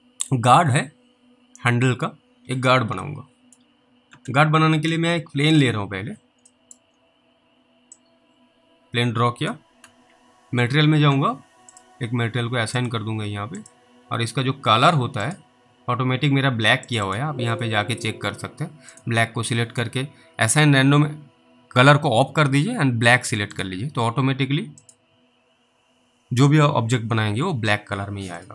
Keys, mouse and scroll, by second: 3.4 middle click, 5.6 click, 6.1 scroll up 1, 6.8 middle click, 6.9 scroll up 1, 8.3 click, 9.8-10.7 typing, 11.8 click, 17.1 double click, 19.0 click, 23.6 click, 28.3 click.